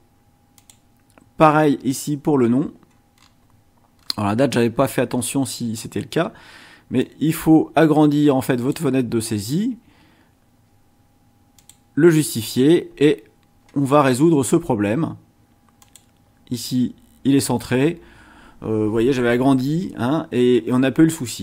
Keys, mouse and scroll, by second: 0.6 click, 3.1-3.4 scroll down 2, 4.0 scroll down 2, 4.8-5.4 scroll up 4, 7.0-8.9 drag, 11.6 click, 14.1-14.9 scroll down 2, 15.8 click.